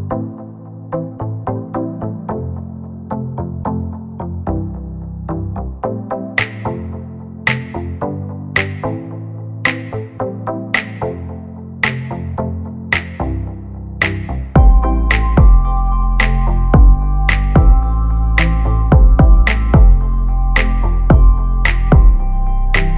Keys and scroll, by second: 0.3 r, 4.9 space, 5.3 e, 6.1 space, 6.6 p, 8.1-11.1 typing, 10.7 Return, 11.2 Escape, 13.8 r, 15.3 space, 16.0 p, 18.1 1, 18.4 0, 18.5 Return, 19.9 space, 22.0 r.